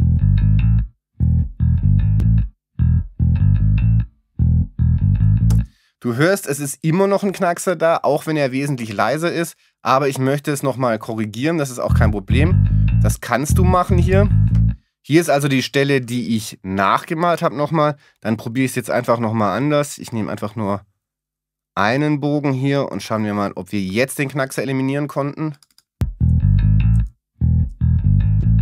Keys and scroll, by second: 5.5 space, 11.4 alt+space.